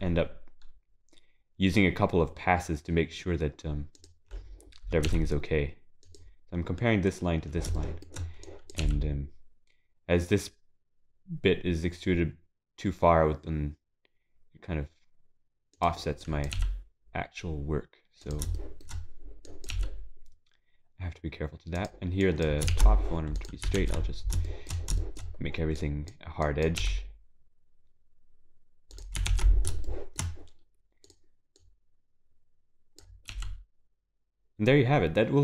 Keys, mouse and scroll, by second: 7.8 shift+middle click, 8.5 click, 8.8 g, 18.4 click, 18.6 shift+middle click, 18.9 scroll up 3, 19.5 click, 23.9 ctrl+s, 23.9 shift+e, 24.1-24.5 scroll down 6, 24.5 shift+middle click, 25.1 shift+middle click, 25.2 scroll up 5, 25.8 click, 26.8 click, 26.8 g, 29.3 ctrl+s, 29.9 shift+middle click, 31.1 click, 32.3 click, 33.0 g.